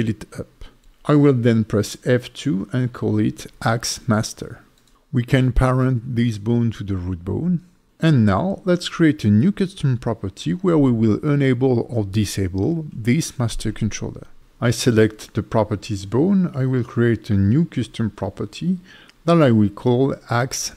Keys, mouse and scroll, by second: 0.1 F2, 4.3 BackSpace, 8.1 Tab, 8.9 click, 11.0 click, 11.0-16.5 scroll down 3, 16.5 click, 17.8 click, 18.6-19.6 scroll down 3, 19.6 click.